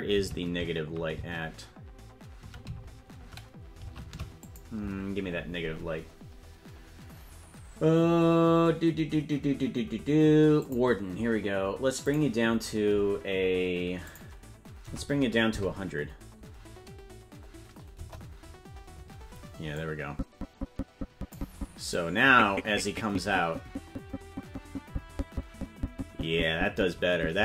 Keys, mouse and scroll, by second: 10.6 click, 12.4-15.8 drag, 18.1 KP_0, 20.2-21.6 drag, 22.4-27.4 drag.